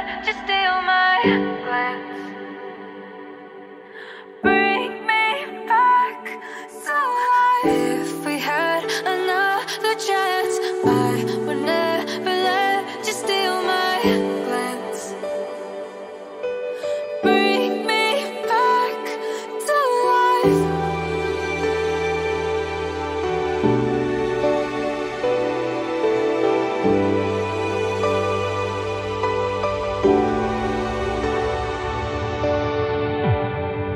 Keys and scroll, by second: 2.9 ctrl+d, 11.9 ctrl+d, 26.0 b, 28.2 ], 28.4 ], 28.5 ].